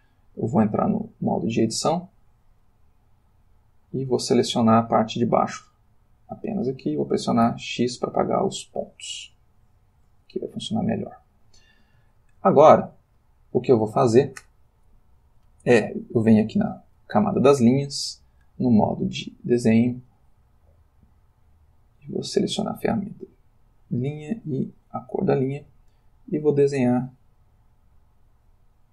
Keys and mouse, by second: 1.0 click, 1.9 click, 3.9-5.7 drag, 7.4 x, 8.0 click, 9.4 ctrl+middle click, 10.7 Tab, 12.2-14.0 shift+middle drag, 16.7 click, 18.5 click, 19.5 click, 21.2 click, 24.4-28.9 drag.